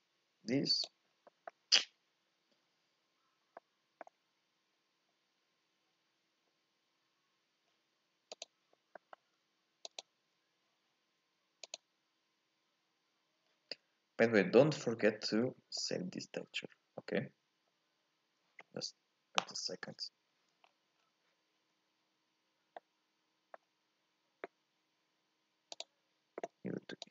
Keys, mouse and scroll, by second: 2.8 z, 3.4 scroll up 1, 3.6-7.8 middle drag, 8.3 click, 19.1 click, 19.2-20.6 middle drag, 20.6-21.0 scroll down 1, 21.0-23.8 scroll up 1, 23.8-24.8 scroll up 1, 24.8-27.1 middle drag.